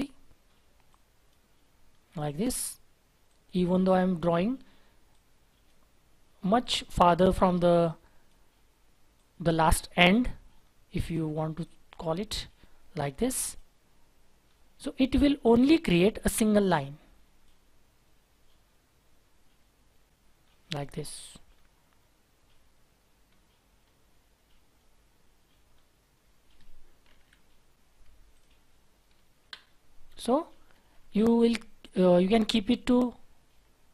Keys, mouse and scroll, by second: 1.8-2.4 scroll down 1, 2.4-3.3 scroll up 1, 10.6-11.0 scroll down 1, 11.0-11.6 scroll up 1, 14.4-14.9 scroll down 1, 14.9-15.4 scroll up 1, 20.4-20.8 scroll down 1, 21.9 scroll down 1, 21.9-23.2 scroll up 1, 23.2-24.7 scroll down 1, 24.7 scroll up 1, 25.7-26.1 scroll down 1, 26.5-27.0 scroll down 1, 27.1 ctrl+z, 29.4 Delete, 30.7 shift+F4.